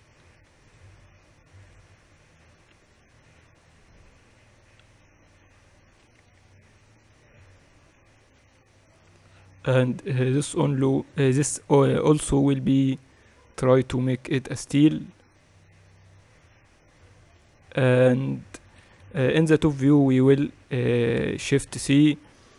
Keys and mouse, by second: 0.5 ctrl+r, 2.5 Tab, 3.4 t, 4.7-6.8 drag, 4.7 t, 6.8 KP_2, 7.0 KP_2, 9.5 KP_1, 12.5-14.4 drag, 19.7 KP_7, 20.1 z, 22.4 shift+c.